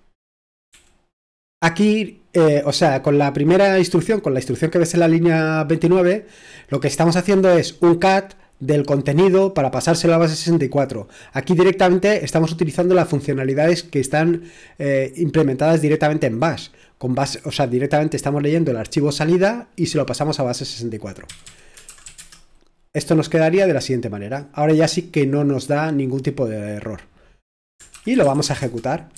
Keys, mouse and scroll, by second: 0.7 typing, 21.0-22.5 typing, 27.7-29.1 typing.